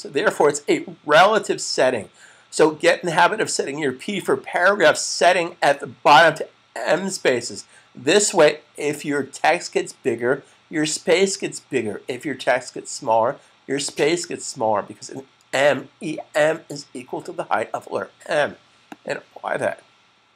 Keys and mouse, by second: 18.7 click.